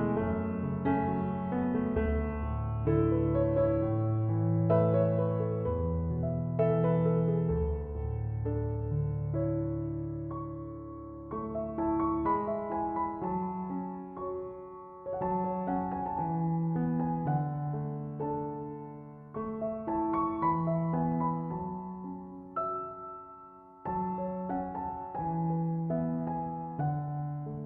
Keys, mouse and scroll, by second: 9.6 8, 10.5 Return, 17.6 1, 17.8 9, 18.5 Return, 26.5 1, 27.3 BackSpace.